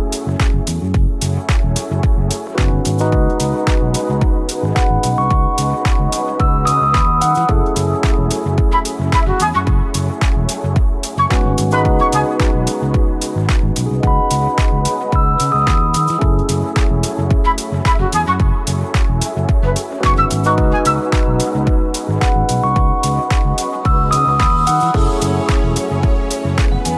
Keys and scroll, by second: 0.6 ctrl+c, 2.3 ctrl+v, 2.7 Return, 3.3 typing, 9.2-10.7 typing, 20.0 ctrl+t, 21.4 ctrl+t.